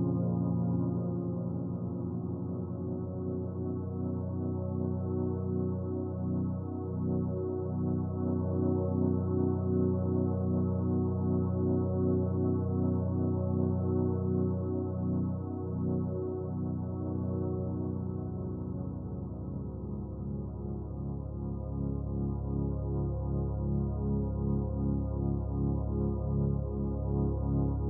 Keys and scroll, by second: 23.5-24.5 typing.